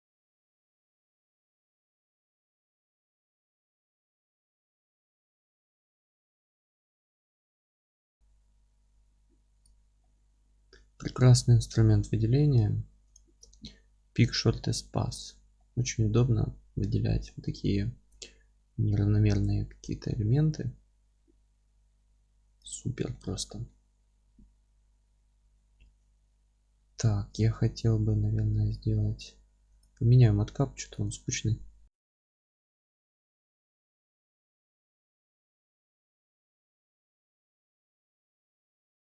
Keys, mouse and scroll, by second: 0.4 alt+shift+click, 1.2 alt+shift+click, 1.7 g, 3.2 middle click, 3.8 click, 4.4 alt+shift+click, 4.8 g, 5.7 click, 6.0-7.3 middle drag, 7.7 alt+shift+click, 8.0 g, 9.6 click, 10.0-11.4 middle drag, 11.4 click, 13.0 alt+shift+click, 15.6-22.8 middle drag, 17.1 g, 22.8 scroll down 2, 23.1-31.3 middle drag, 23.3-23.7 scroll up 2, 25.8 Tab, 32.4 middle click, 32.5 click, 32.7 scroll down 2, 32.8-36.7 alt+middle drag, 33.3 scroll up 2, 34.0 ctrl+alt+space, 36.7-38.3 drag, 38.3-39.1 alt+middle drag, 38.9-39.1 scroll up 1.